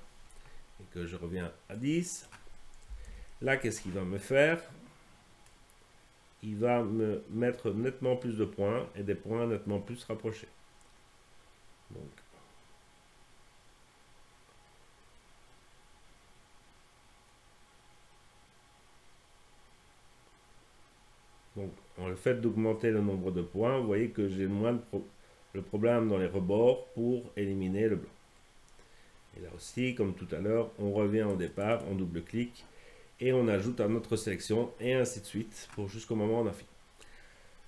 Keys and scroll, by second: 0.0-0.2 typing, 2.7-3.6 typing.